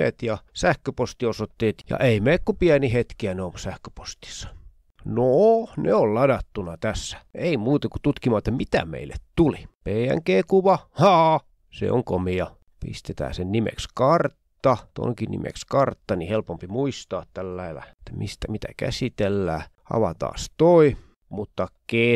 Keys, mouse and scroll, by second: 0.4 click, 0.9 click, 1.4 click, 2.0 click, 5.3 click, 7.4 click, 9.7-10.6 ctrl+scroll up 4, 10.9-11.8 ctrl+scroll up 2, 11.9 F2, 12.9 Home, 13.3-15.0 typing, 16.0 Down, 16.2 F2, 16.5 Home, 16.8-18.5 typing, 19.9 click, 21.6 click.